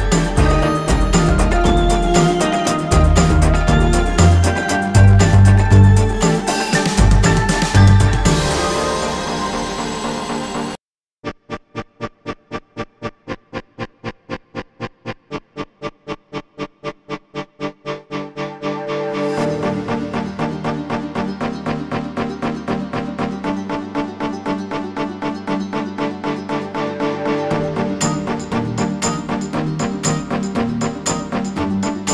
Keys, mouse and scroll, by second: 3.3 alt+scroll up 1, 3.9 click, 4.6 alt+scroll down 1, 5.7 alt+scroll up 1, 6.4 scroll up 1, 6.7 alt+scroll down 1, 7.3 alt+scroll up 1, 7.9 click, 8.5 alt+scroll down 1, 9.1 space, 11.7-15.9 drag, 15.9 scroll down 1, 19.3 click, 20.5-22.1 drag, 24.7 alt+scroll up 1, 25.1 click, 25.8 alt+scroll down 1, 26.2 alt+scroll up 1, 26.9-28.3 drag, 28.3 alt+scroll down 1, 28.8 space, 29.2-32.1 drag.